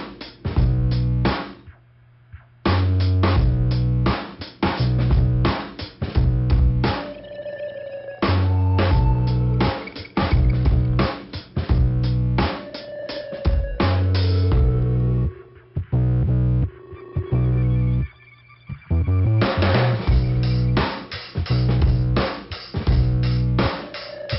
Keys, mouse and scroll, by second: 1.7-2.4 scroll down 1, 6.3 click, 7.2 middle click, 9.5 middle click, 13.5 middle click, 14.5 click, 16.4 click, 16.6 click, 17.8 click, 18.7 click, 19.6 click, 20.3 click, 21.4 click, 23.2 middle click, 24.1 click.